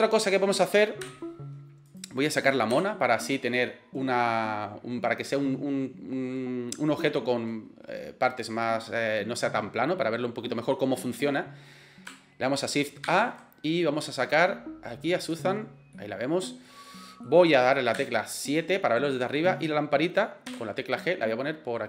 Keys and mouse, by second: 1.0 Delete, 1.9 click, 2.7 Delete, 3.6-4.2 middle drag, 13.1 shift+a, 15.9-16.7 middle drag, 16.8-17.3 middle drag, 18.0 KP_7, 19.4 right click, 20.5 g.